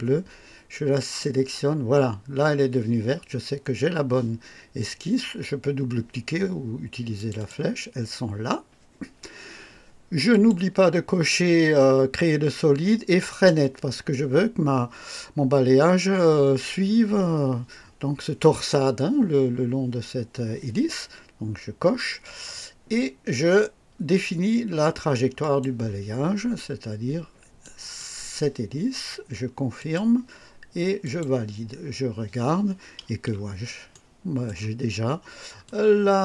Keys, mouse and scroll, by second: 0.9 click, 7.2 click, 10.3 click, 13.3 click, 25.4 click, 27.6 click, 29.8 click, 31.0 click, 33.1 KP_1, 33.9-34.6 right drag, 34.8-35.3 scroll up 2, 35.6-36.2 drag.